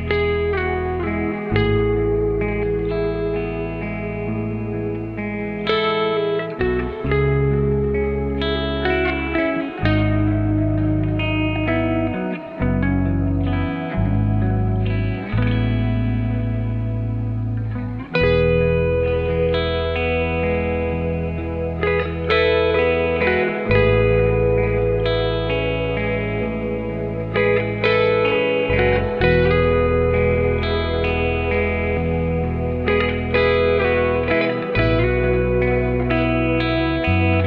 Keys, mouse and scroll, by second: 0.6-1.3 drag, 1.3-4.5 right drag, 6.1 scroll up 2, 6.3-6.7 scroll down 2, 6.7 click, 7.1 Tab, 8.8 click, 9.9 click, 11.4 s, 13.1 click, 13.6 s, 15.7 g, 18.0 e, 19.4 s, 21.0 r, 22.6 e, 24.2 s, 25.7 click, 26.7 s, 27.6 click, 27.9 s, 29.9-31.0 drag, 31.3 s, 32.9 e, 34.1 s, 35.4 s, 36.8 click.